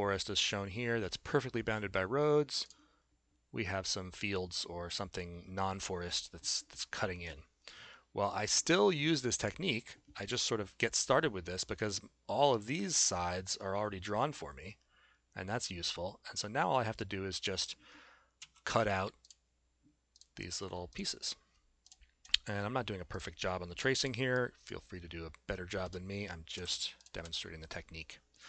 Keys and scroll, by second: 18.4 a, 26.6 s.